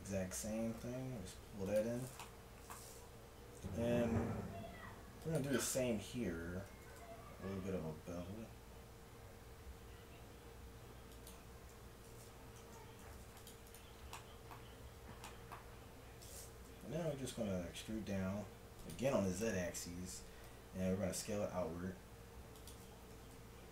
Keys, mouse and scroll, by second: 0.8 g, 2.2-3.7 drag, 3.7 ctrl+r, 6.8 ctrl+b, 11.8 a, 12.6 ctrl+Tab, 13.7 click, 17.0 e, 19.1 KP_1, 20.5 s, 23.0 g.